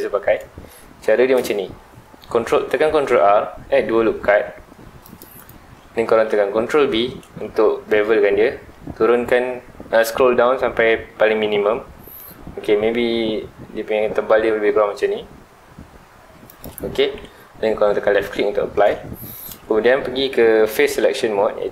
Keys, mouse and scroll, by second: 0.8-3.0 shift+middle drag, 3.0 ctrl+r, 5.5 right click, 7.2 ctrl+b, 16.6 click, 17.9 scroll down 2, 18.1-19.2 middle drag, 19.2 scroll down 2, 19.4-20.8 middle drag, 20.8 3.